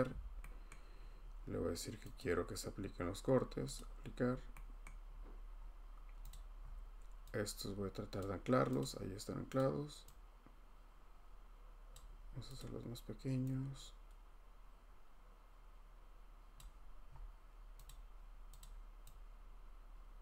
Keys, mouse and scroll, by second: 0.7 scroll, 2.2 click, 3.8 click, 4.2-5.0 scroll, 5.6-6.3 scroll, 6.3 click, 6.6 scroll, 8.2 click, 8.8 click, 9.6 click, 11.9 click, 12.6 click, 16.5 click, 17.1 middle click, 17.1 middle click, 17.2 middle click, 18.0 click, 18.6 click, 18.6 scroll.